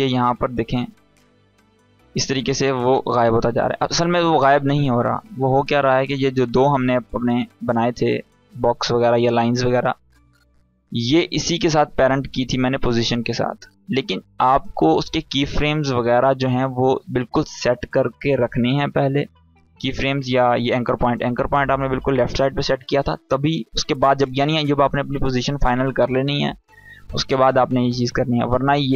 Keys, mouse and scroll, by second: 3.8 ctrl+z, 5.7 click, 11.7-13.8 drag, 14.0 ctrl+z, 15.8 ctrl+z, 17.0 ctrl+z, 19.5 scroll up 1, 21.6 click, 21.6 click.